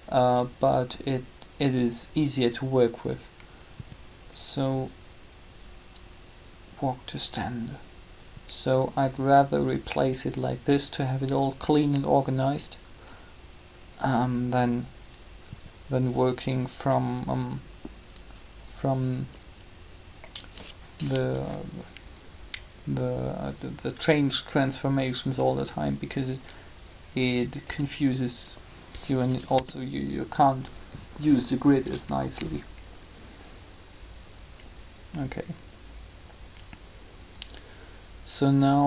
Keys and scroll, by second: 21.1 3, 27.6 b, 29.2 Delete, 29.5 Return.